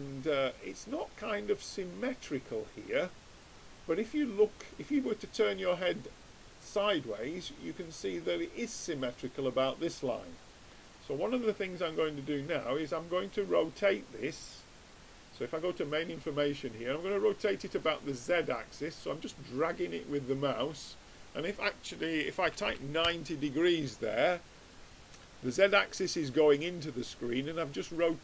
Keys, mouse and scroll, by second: 11.3-13.2 drag, 13.6-15.5 drag, 15.7-17.3 drag, 17.7-19.4 drag, 21.3-23.1 drag, 24.2-28.2 middle drag.